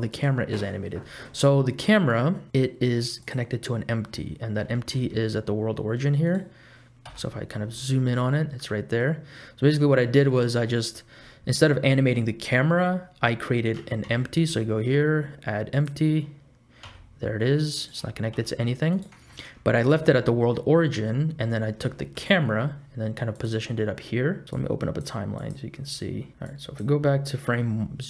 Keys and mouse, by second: 0.1 click, 1.0 middle click, 3.2 click, 4.7 g, 7.0 KP_Decimal, 7.9 click, 8.3 middle click, 10.0 click, 14.0 shift+a, 16.8 s, 18.3 g, 20.1 ctrl+z, 21.9 shift+middle click, 22.3 middle click, 23.3 click, 24.7 click, 25.5 click, 26.7 click.